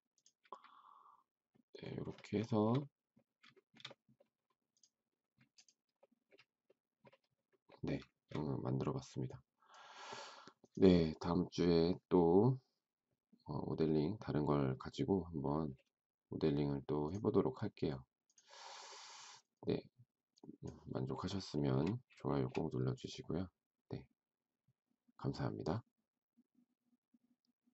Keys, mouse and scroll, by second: 2.4 shift+middle click, 3.5 shift+middle click, 8.0 shift+middle click, 21.5 shift+middle click, 22.3 shift+middle click.